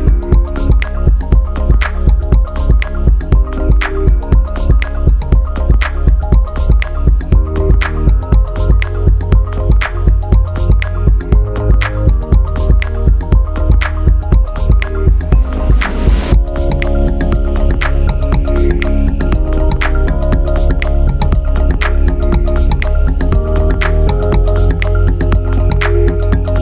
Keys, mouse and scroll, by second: 0.7 alt+middle click, 3.6 scroll up 2, 7.3 click, 8.4 click, 8.9 click, 10.7 scroll down 2, 11.0 scroll up 2, 11.2 scroll down 2, 11.4 scroll up 2, 11.7 scroll down 1.